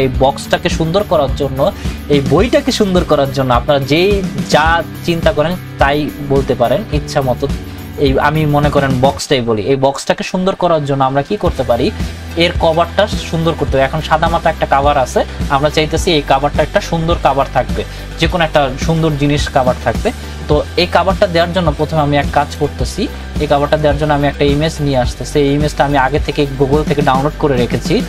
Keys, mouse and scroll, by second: 22.4 click.